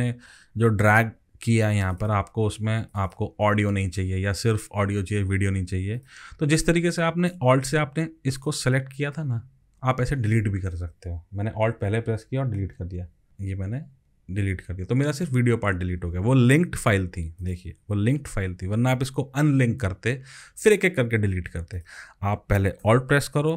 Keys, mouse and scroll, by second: 2.0 double click, 3.0 double click, 8.4 alt+click, 12.6 alt+Delete, 14.2 Delete, 16.3 ctrl+z.